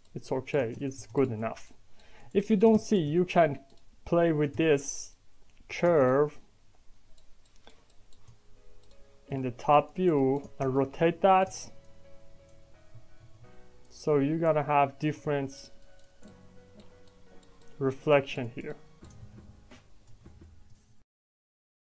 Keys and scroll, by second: 13.1 ctrl+z, 19.3 ctrl+z, 20.1 ctrl+shift+z.